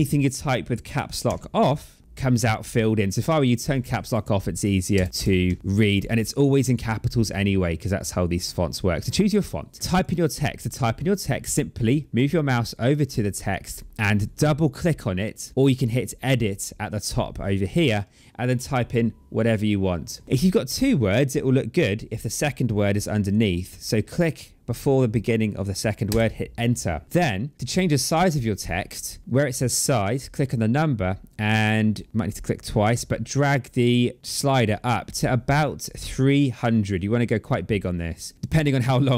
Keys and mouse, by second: 1.0 Caps_Lock, 1.9 c, 3.5 click, 4.7 BackSpace, 5.2 Delete, 5.6 click, 7.7 click, 9.8 click, 11.6 click, 15.5 click, 20.6 click, 22.7 click, 25.9 Return, 30.1 click, 33.1 click.